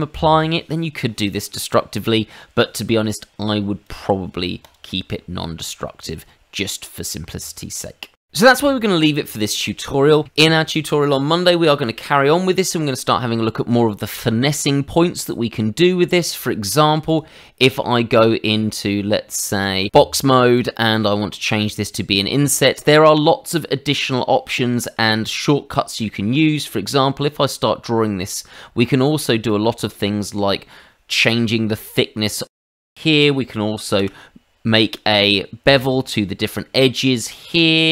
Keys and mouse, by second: 3.8 click, 4.6 click, 5.4 middle click, 8.2 middle click.